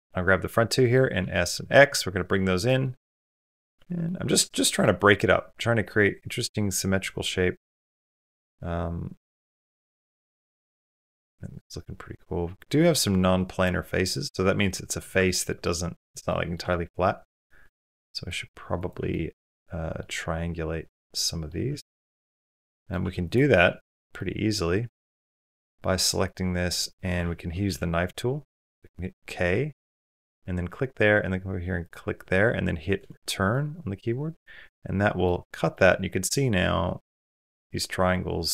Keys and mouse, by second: 1.1 s, 2.6 middle click, 3.6 Tab, 3.9-4.6 middle drag, 4.8-14.8 middle drag, 15.1 ctrl+middle click, 15.4 middle click, 16.1 shift+middle drag, 16.5 middle click, 17.5-18.1 middle drag, 18.9 shift+drag, 19.4 click, 20.0-21.3 drag, 21.5 Tab, 21.9 middle click, 22.6 middle click, 23.1 3, 23.9-26.7 middle drag, 28.1 k, 33.3 middle click, 34.2 middle click, 35.5-38.5 middle drag.